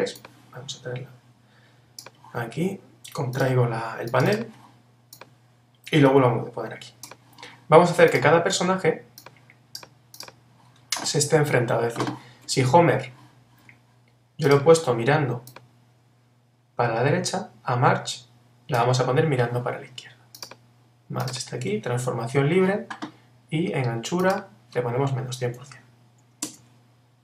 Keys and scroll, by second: 22.2 super+t, 26.4 Return.